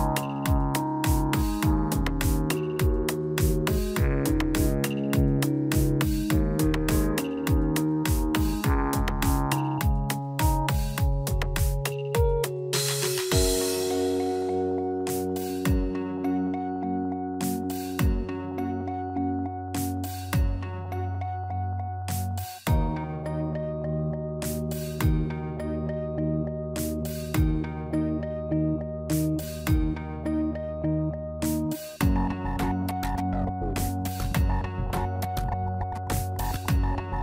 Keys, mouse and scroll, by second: 0.8 middle click, 1.3 shift+middle click, 1.6 middle click, 3.2 Tab, 3.7 s, 4.6 y, 4.9 right click, 6.5 a, 7.2 s, 10.6 middle click, 14.8 middle click, 15.2 Tab, 16.3 ctrl+a, 17.8 click, 22.9 click, 23.2 click, 26.5 middle click, 29.7 shift+click, 32.7-33.8 scroll up 7, 33.7 shift+middle click, 34.4-34.9 scroll down 1, 35.0-35.5 scroll down 5, 35.8 middle click, 37.1 scroll up 2.